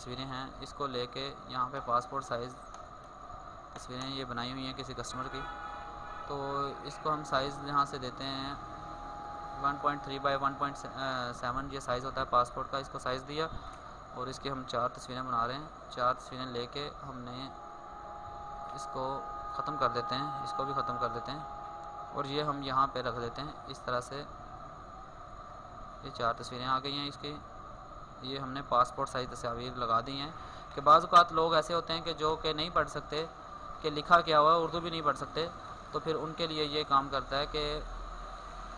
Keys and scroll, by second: 17.6 ctrl+c, 18.1 ctrl+w, 21.8 ctrl+v, 23.0 ctrl+t, 31.3 alt+Tab.